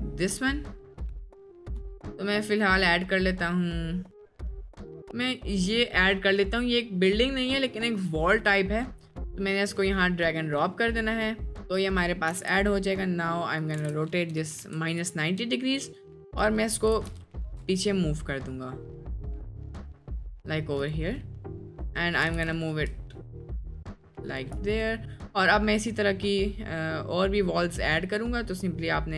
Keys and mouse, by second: 10.2-10.6 middle drag, 10.9-11.4 middle drag, 11.8 click, 12.1 middle click, 12.3 r, 13.8 r, 16.2 click, 16.9 g, 22.3 g, 24.8 click.